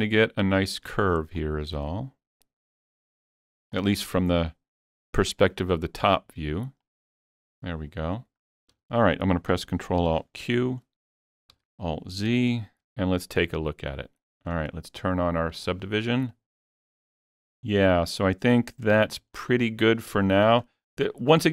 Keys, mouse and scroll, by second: 1.4-8.5 alt+drag, 8.4 scroll down 2, 8.7 alt+a, 10.0 ctrl+alt+q, 11.6 alt+z, 12.3 Tab, 12.5-12.9 scroll down 1, 12.9-19.7 middle drag, 15.5 click, 18.9 Tab, 19.4-19.7 scroll up 1, 20.3 shift+middle click, 20.6 scroll up 2, 20.9-21.5 middle drag.